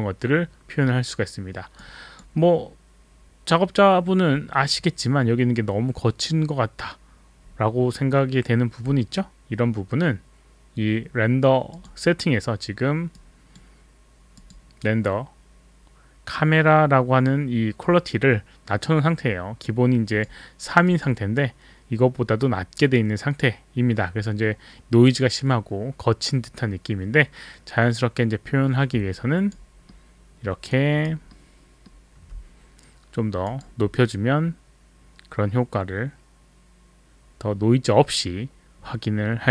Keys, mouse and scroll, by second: 1.8 click, 11.7 click, 13.2 click, 14.4 click, 20.1 click, 20.8 click, 29.2 alt+click, 29.7 alt+click, 29.8 alt+middle click, 30.7 alt+right click, 30.7 alt+middle click, 31.2 alt+right click, 31.3 alt+middle click, 31.3 alt+right click, 33.4 click.